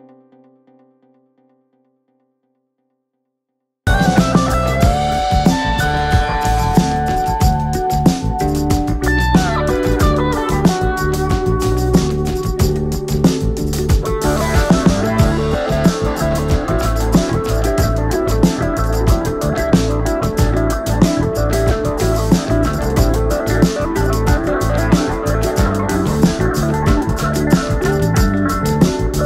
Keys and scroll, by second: 2.0 shift+F2, 2.2 F3, 2.6 Escape, 11.2 shift+F2, 12.0 ctrl+z, 12.4 F3, 12.9 Escape.